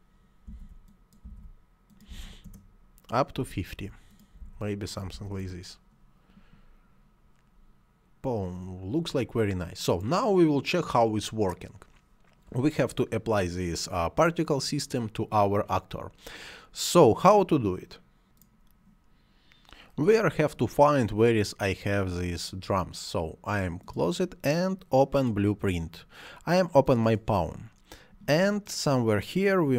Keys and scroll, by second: 0.3-2.0 typing, 2.2 Return, 3.1 5, 3.6 0, 4.1 5, 4.9 0, 5.2 Return.